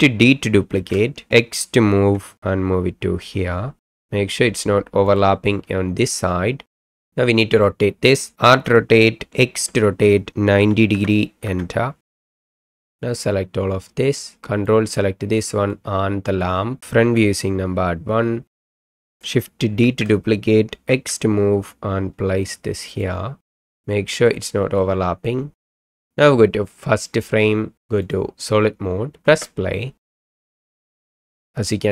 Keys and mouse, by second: 0.7 shift+d, 1.9 x, 6.6 KP_7, 8.5 r, 9.6 x, 10.6 KP_9, 10.9 KP_0, 11.4 KP_Enter, 12.5-12.8 middle drag, 12.9-14.3 drag, 14.8 ctrl+click, 15.6 ctrl+z, 15.8 ctrl+click, 16.8 KP_7, 17.0 KP_1, 18.6 shift+click, 19.8 shift+d, 20.9 x, 23.7 middle click, 24.8-25.7 middle drag, 27.0 click, 29.3 space.